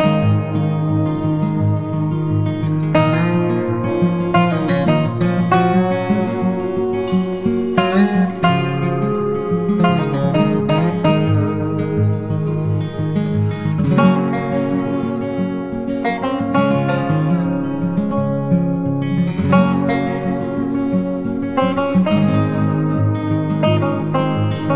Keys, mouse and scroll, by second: 2.5 [, 6.5 double click, 9.1 typing, 14.0 typing, 20.5-21.3 typing.